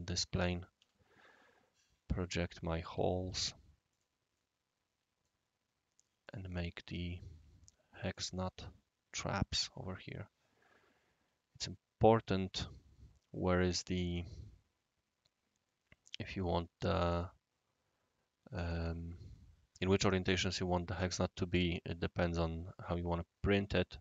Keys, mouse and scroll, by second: 0.7 typing, 1.3 right click, 2.8 typing, 3.2 click, 3.9 click, 4.3 right click, 6.2 click, 8.1 click, 8.4 click.